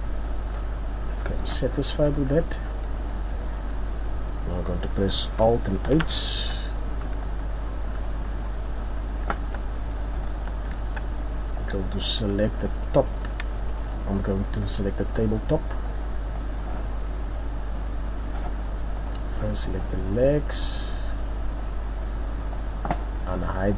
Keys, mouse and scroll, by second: 0.2-0.6 scroll down 4, 0.5 scroll up 3, 1.1-1.5 scroll down 1, 1.8 middle click, 1.8-2.5 scroll down 2, 3.1 middle click, 3.1 scroll down 1, 5.8 alt+h, 6.7-7.2 scroll down 5, 7.2 middle click, 7.7-8.0 scroll up 4, 8.0 middle click, 8.6-9.4 scroll up 1, 9.4 scroll up 1, 9.4 Tab, 10.0 scroll down 1, 10.1 middle click, 10.8 Tab, 11.6 right click, 12.0-12.6 scroll down 4, 12.4 middle click, 12.9-13.7 scroll up 2, 15.0 click, 15.9 click, 19.0 right click.